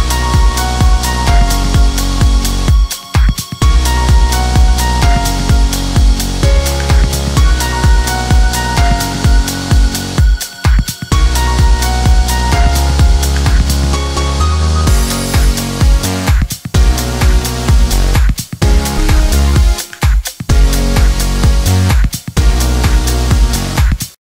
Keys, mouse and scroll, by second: 1.3 Right, 3.1 Down, 3.5 Right, 5.3 Left, 6.7 Return, 7.6 click.